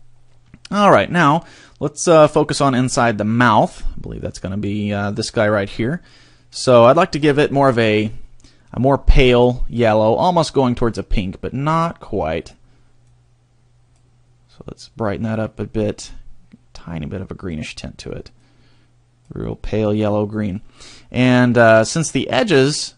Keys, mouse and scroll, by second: 3.1 middle click, 3.7-4.2 scroll up 2, 4.2 middle click, 4.7 middle click, 5.7 scroll up 1, 6.5 middle click, 9.1-9.5 scroll up 2, 10.4 click, 13.0 click, 14.5 click, 18.3 click.